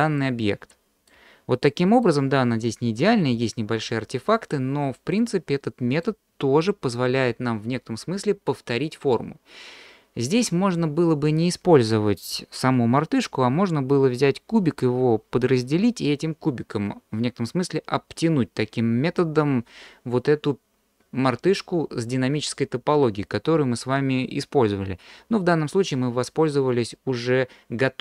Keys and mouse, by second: 0.2-1.1 middle drag, 1.7 middle click, 4.9-6.0 middle drag.